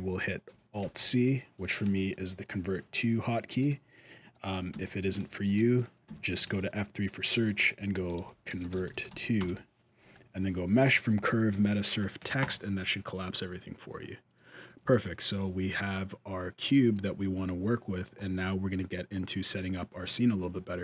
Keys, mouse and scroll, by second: 0.6 alt+c, 3.4 right click, 4.1 right click, 4.5 F3, 5.8 F3, 14.1 middle click, 14.6 alt+a, 14.8-15.5 scroll up 1, 15.5 middle click, 17.0 scroll down 1.